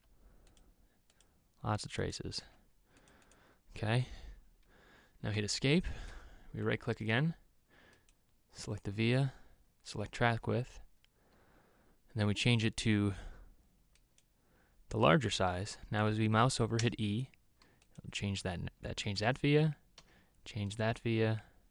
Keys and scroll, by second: 0.3 v, 2.9 v, 5.8 Escape, 17.3 e, 20.5 e.